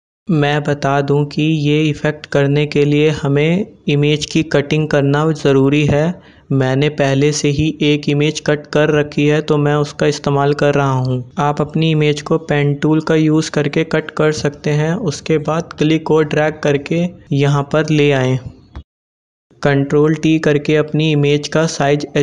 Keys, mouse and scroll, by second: 5.1 click, 10.4-19.0 drag, 18.9 t, 20.3-22.2 alt+drag.